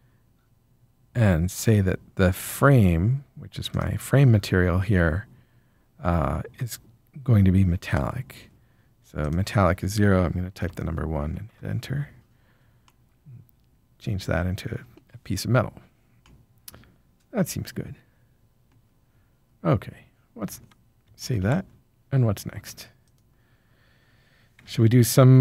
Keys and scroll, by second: 10.6 1, 11.5 Return, 21.3 ctrl+s.